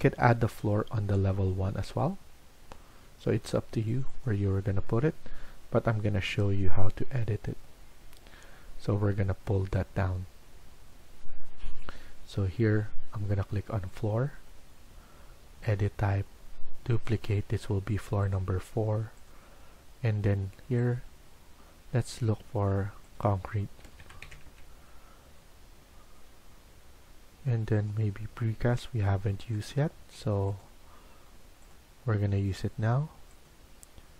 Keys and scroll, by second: 23.5-24.9 typing.